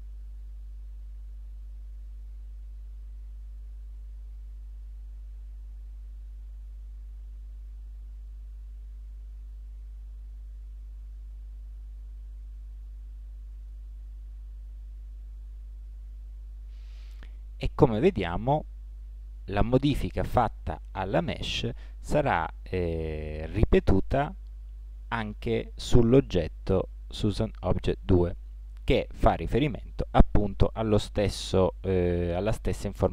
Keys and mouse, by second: 3.1 a, 4.6 a, 6.8 s, 8.8 space, 11.9 space, 14.6 Tab, 16.2 z.